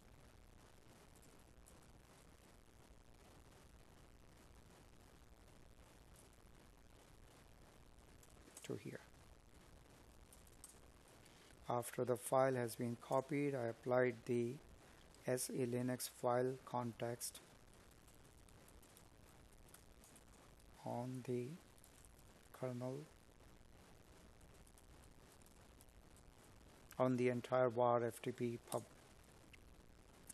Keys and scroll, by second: 0.1 Tab, 4.6 Tab, 17.9 space, 19.4 space.